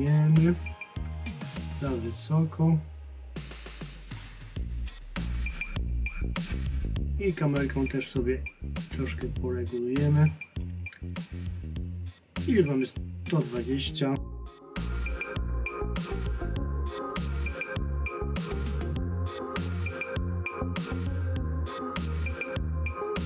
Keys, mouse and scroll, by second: 2.1 click, 13.3 click, 15.0 click, 16.8 scroll down 1, 16.9 middle click, 19.0 click, 19.4 click, 20.2 click, 21.4 click, 22.5 click, 23.0 click.